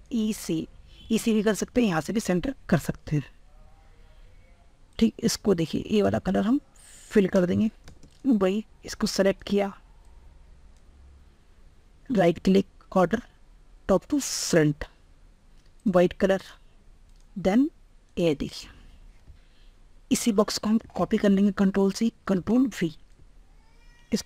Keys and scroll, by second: 18.9 ctrl+Tab, 20.6 ctrl+c, 21.9 ctrl+v.